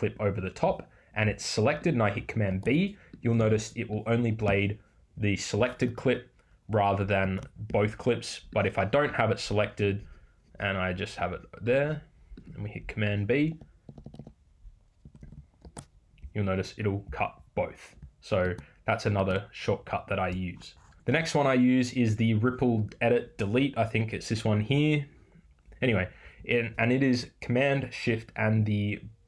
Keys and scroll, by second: 13.5 Right, 15.0 Left.